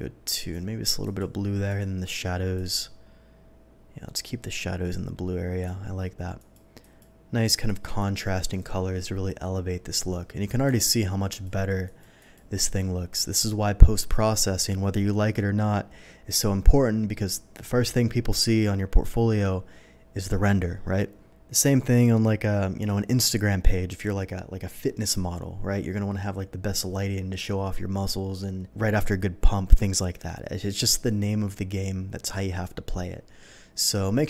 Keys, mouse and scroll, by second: 1.0 click, 1.7 click, 2.5 click, 6.4 click, 6.8 click, 7.5 click, 7.8 click, 10.8 alt+click, 11.3 alt+click, 11.8 alt+click, 12.2 alt+click.